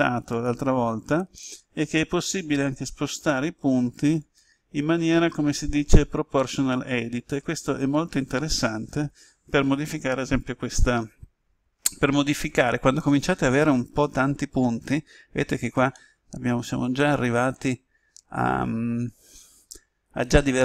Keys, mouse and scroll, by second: 4.2 click, 15.8-20.6 middle drag.